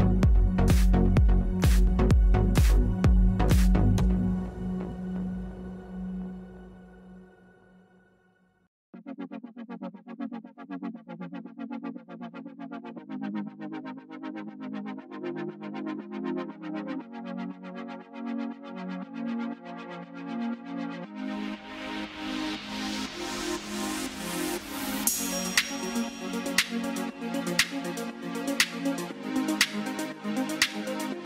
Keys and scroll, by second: 6.1 ctrl+z.